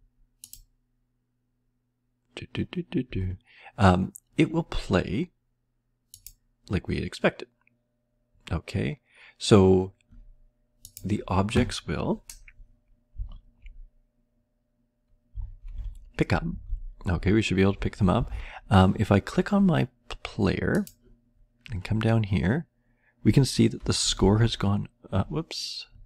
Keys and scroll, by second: 13.1 Down, 15.3 Down, 15.7 Left, 16.5 Up, 16.5 Right, 17.7 Left, 17.7 Up, 18.1 Down, 18.3 Right, 24.1 Left.